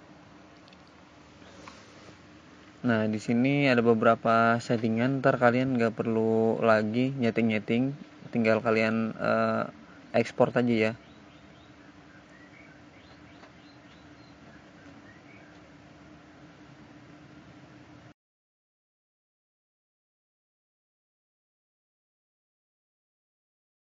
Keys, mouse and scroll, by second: 0.6 click, 5.4 click, 5.6 click, 11.1 click, 18.0 click.